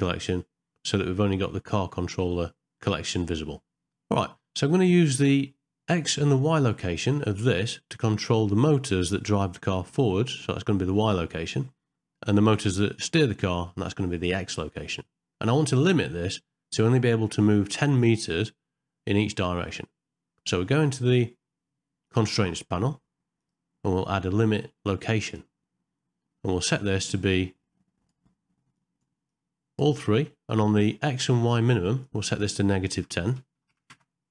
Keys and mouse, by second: 0.2 click, 23.4-25.4 drag, 32.0-34.0 drag.